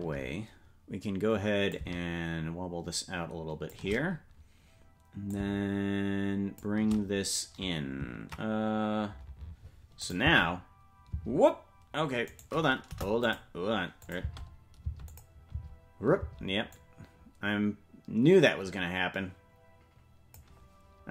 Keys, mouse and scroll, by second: 1.7-3.8 drag, 5.3-6.6 shift+drag, 10.0 click, 10.2 space, 11.7 space, 12.2 right click, 12.8 Delete, 14.0-15.2 drag, 14.2 space, 15.1 space, 15.5 space, 16.7-20.3 drag, 16.7 space.